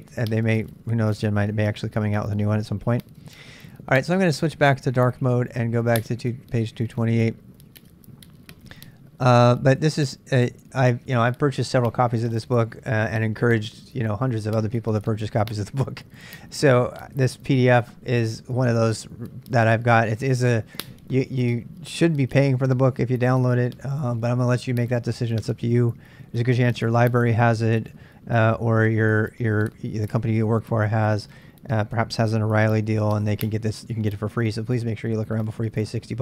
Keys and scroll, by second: 2.6 k, 2.9-4.1 k.